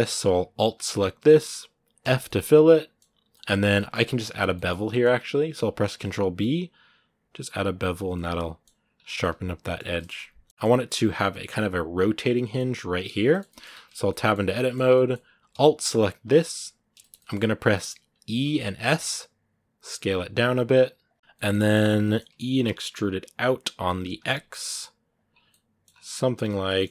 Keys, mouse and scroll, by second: 0.3 alt+right click, 0.6 middle click, 1.4-1.7 scroll up 1, 1.8 f, 2.0-3.4 middle drag, 3.4 scroll up 1, 3.5-4.9 middle drag, 4.9-5.5 scroll up 1, 5.7 ctrl+b, 7.9 middle click, 8.7 scroll down 1, 9.0-10.3 middle drag, 10.3 scroll up 1, 10.4-13.5 middle drag, 13.5 Tab, 13.8 scroll up 1, 13.8-16.0 middle drag, 16.0 alt+right click, 16.8-18.2 shift+middle drag, 18.2 e, 21.1-22.3 shift+middle drag, 22.3 e, 25.1 scroll down 1, 25.3 middle click, 25.6 scroll up 2, 26.2 g.